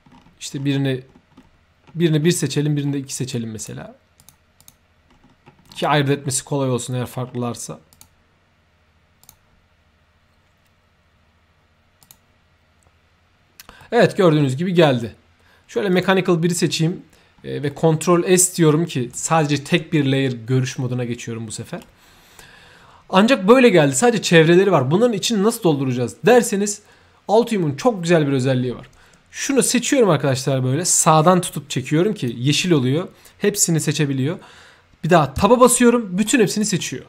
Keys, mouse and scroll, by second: 1.3-1.8 scroll up 1, 1.8-2.3 scroll down 2, 2.7 scroll up 1, 3.6 click, 4.2 click, 4.6 click, 5.1-6.2 scroll down 1, 6.2 scroll up 1, 6.4-6.7 scroll down 1, 7.9 click, 9.2 click, 12.0 click, 12.8-13.6 scroll down 1, 13.6 scroll up 1, 13.8 middle click, 15.9 click, 16.5 ctrl+shift+s, 17.7 middle click, 18.6-19.1 right drag, 21.8-22.3 right drag, 29.5-32.2 drag, 35.5 Tab, 36.2-36.6 right drag, 36.8 middle click.